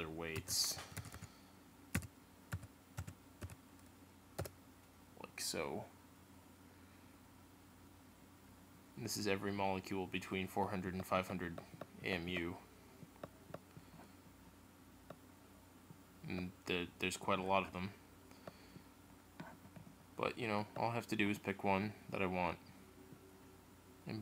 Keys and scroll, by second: 0.3 shift+;, 4.4 Return.